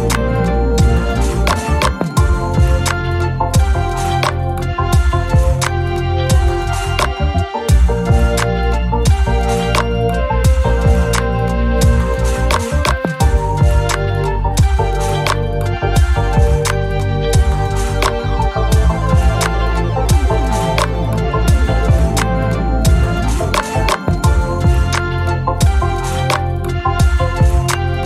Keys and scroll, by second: 4.0 F1, 4.3-5.2 typing, 7.2-8.1 typing, 9.9 shift+F6, 13.4 F7, 13.9 F1, 14.7 typing, 18.9-19.9 typing, 22.0 F1, 22.5 space, 24.3 shift+F6.